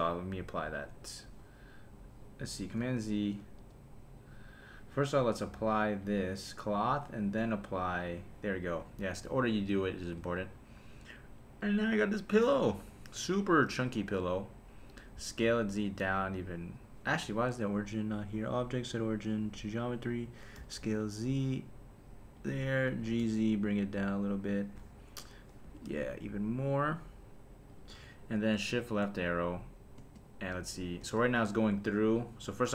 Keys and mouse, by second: 0.6 super+a, 2.6 super+z, 3.4 super+z, 5.4-6.2 drag, 7.1-7.9 drag, 10.2 /, 15.1 s, 15.4 z, 17.1 Escape, 18.2-19.7 drag, 20.6 s, 20.8 z, 22.3 click, 23.0 g, 23.2 z, 24.5 click, 25.6 g, 25.9 z, 27.7 click, 28.7 shift+Left, 30.0 space, 31.0 space.